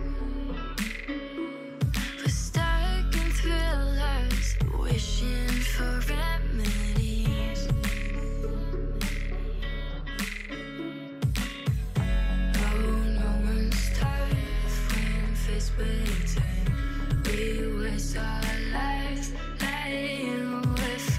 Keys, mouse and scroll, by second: 0.2 g, 1.2 e, 2.3-5.8 typing, 7.3-7.9 scroll down 2, 7.9 shift+middle click, 8.6 click, 9.6-10.5 scroll up 3, 10.5 g, 12.7 x, 13.4-14.9 middle drag, 15.2 alt+z, 15.6-16.9 middle drag, 16.9-17.2 scroll up 2, 17.2-18.1 shift+middle drag, 18.1 click, 18.7 3, 18.8 click, 19.0 shift+drag, 19.2 shift+click, 19.4 s, 20.8 middle click, 21.1 scroll down 5.